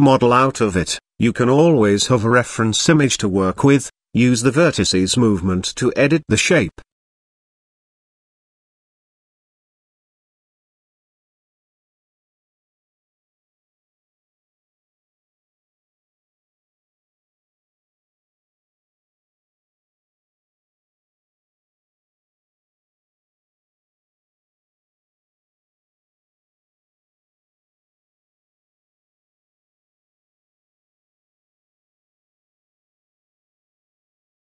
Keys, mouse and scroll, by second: 1.0-1.7 middle drag, 2.8 shift+middle drag, 3.3 s, 5.3-6.5 middle drag, 6.8 Tab, 7.7 click, 8.4 click, 8.7 middle click, 11.1 g, 13.2 scroll up 1, 13.2 middle click, 13.7 shift+middle click, 15.9 middle click, 16.6 e, 20.1 e, 23.7 e, 25.4 s, 27.4 e, 31.4 e, 33.2 s.